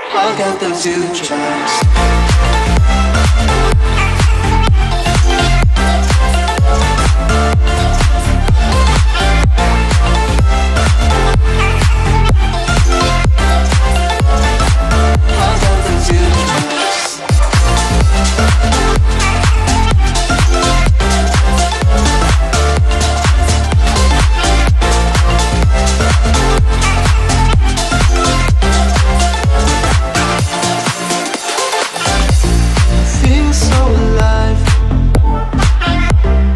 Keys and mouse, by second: 1.8 space, 2.0 click, 2.2 space, 3.5 ctrl+-, 3.8 ctrl+=, 4.4 space, 4.7 click, 4.8 space, 5.2 ctrl+-, 5.4 ctrl+=, 5.8 ctrl+-, 6.2 space, 6.3-7.0 click, 6.8 space, 7.1 click, 7.4 space, 9.2 click, 9.8-11.5 alt+drag, 12.7 ctrl+=, 13.1 space, 13.2-13.6 click, 13.4 space, 13.9 click, 14.2 Down, 14.7 Up, 15.5 click, 16.0 right click, 17.5 click, 18.7 right click, 19.7 click, 21.5 right click, 22.5 click, 23.6 ctrl+-, 24.0 space, 24.1 click, 24.3 space, 24.5 click, 24.7 space, 25.3 click, 25.4 space, 26.0 click, 26.7-28.7 alt+drag, 29.5 right click, 30.0 click, 32.0 Down, 32.7 click, 32.9 space, 33.0 click, 33.2 space, 33.5 click, 33.6 space, 33.9 click.